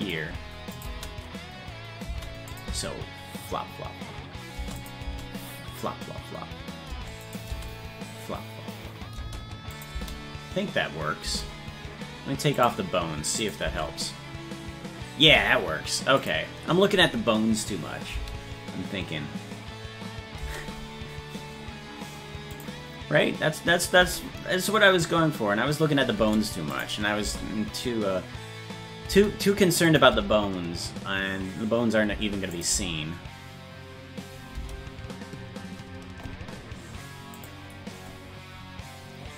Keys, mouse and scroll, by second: 0.8 click, 2.1 space, 2.5 click, 2.7 space, 4.8 click, 5.1 space, 7.3 click, 7.5 space, 9.8 click, 10.0 space, 12.6 click, 13.4 click, 13.7 space, 16.2 click, 18.1 space, 22.6 click, 24.0 space, 26.8 click, 27.2 space, 29.9 click, 30.1 space, 32.6 click, 32.6 space, 37.4 click.